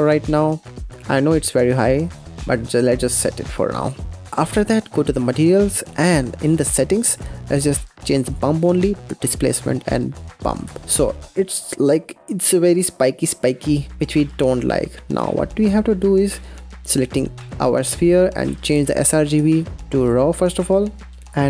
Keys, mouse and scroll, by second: 0.4-2.4 middle drag, 2.4-3.9 right drag, 3.9-5.1 middle drag, 5.1 click, 5.8-8.2 scroll down 29, 6.3 drag, 8.2-10.7 drag, 10.8-12.0 middle drag, 12.0-13.4 scroll down 2, 13.4 scroll up 1, 14.4-15.6 scroll up 1, 15.6 scroll up 1, 16.2 click, 18.7-21.1 drag, 21.1-21.4 middle drag.